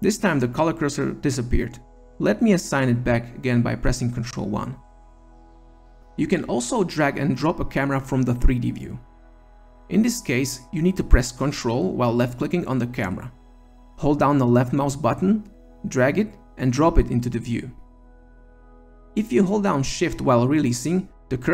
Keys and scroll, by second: 3.3 ctrl+1.